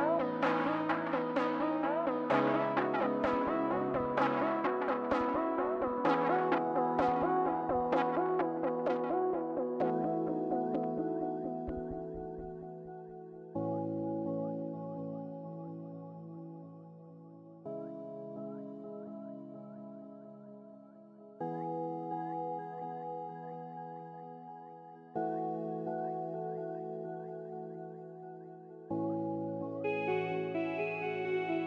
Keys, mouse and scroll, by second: 1.2 scroll down 1, 4.2 scroll up 1, 4.9 scroll up 1, 5.0 scroll down 1, 7.7 scroll down 1, 7.8 scroll up 1, 11.3 scroll down 1, 13.0 scroll up 1, 13.7 scroll down 1, 14.1 scroll up 1, 14.3 scroll down 1, 20.5-21.5 scroll up 1, 21.5-21.8 scroll down 1, 25.9-26.4 scroll down 1, 29.2-30.3 scroll up 1.